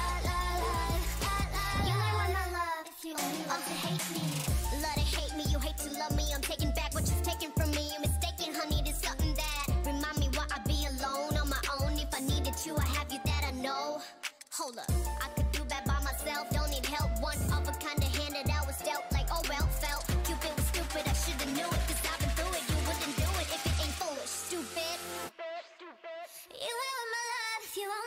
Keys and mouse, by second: 0.1 g, 1.1 g, 2.0 g, 2.1-6.7 drag, 2.9 g, 3.6 g, 5.1 g, 6.0 g, 6.9 click, 7.6 click, 7.6 g, 8.3 a, 10.3 g, 11.8 click, 13.2-14.6 drag, 16.6-18.4 right drag, 16.9 x, 18.3 Tab, 19.3 Tab, 20.1 click, 21.0 g, 21.6 Tab, 25.9 Tab, 27.8 ctrl+Tab.